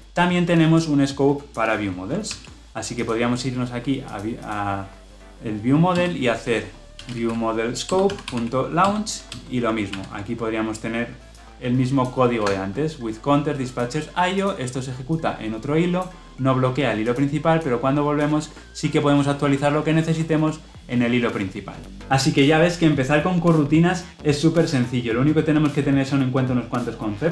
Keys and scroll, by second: 2.1 ctrl+c, 2.9 ctrl+c, 7.8 Return, 8.9 Return, 9.8 ctrl+v.